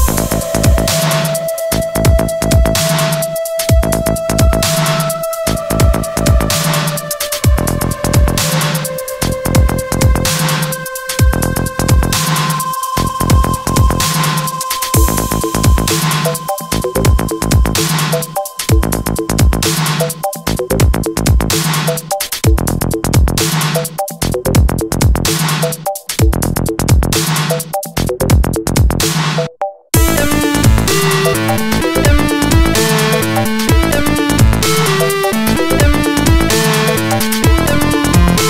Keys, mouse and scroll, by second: 3.3 alt+middle click, 3.8 alt+middle click, 4.6 F3, 6.3 middle click, 7.9 F3, 7.9 middle click, 9.2 alt+middle click, 10.6 ctrl+click, 16.1 ctrl+click, 18.8 middle click, 19.4 middle click, 19.8 middle click, 20.9 alt+middle click, 23.8 alt+click, 27.0 middle click, 27.5 middle click, 28.2 alt+click, 30.5 middle click, 31.2 alt+click, 34.2 middle click, 34.9 middle click, 34.9 scroll down 1, 36.0 alt+middle click.